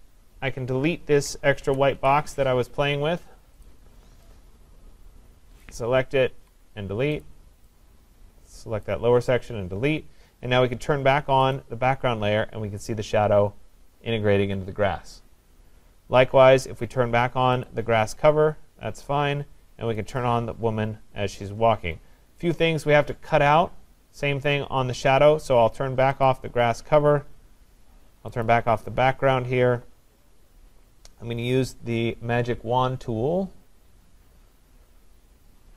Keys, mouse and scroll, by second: 0.0-1.6 scroll, 1.6 ctrl+-, 2.0 ctrl+-, 3.7 click, 5.6 click, 6.3 Delete, 7.3 click, 8.8 click, 9.0 Delete, 11.6 click, 17.8 click, 20.2 click, 26.3 click, 28.5 click.